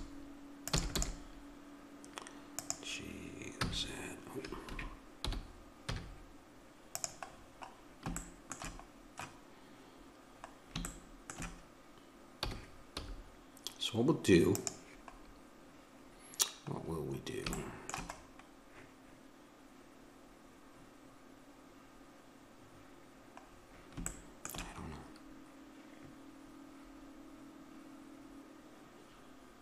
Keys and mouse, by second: 0.8 e, 1.1 g, 3.7 z, 5.2 g, 12.4 g.